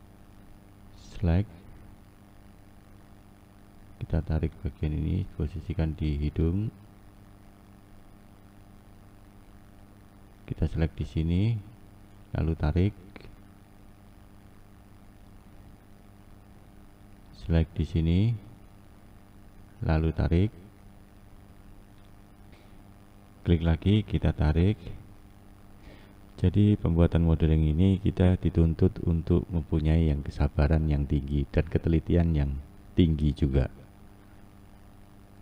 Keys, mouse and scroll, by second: 1.3 click, 2.7-4.7 shift+middle drag, 4.7 click, 10.0 click, 12.7 click, 17.9 click, 19.7 click, 23.1 click, 24.2 click, 27.9 click, 29.2 click, 32.7 scroll up 1, 33.0-34.5 scroll down 1, 34.5 click.